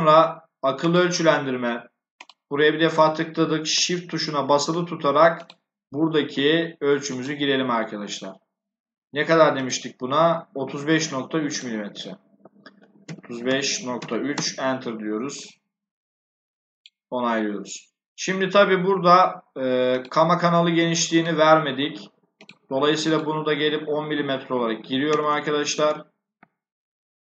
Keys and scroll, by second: 12.4-14.4 typing, 24.7-25.7 typing.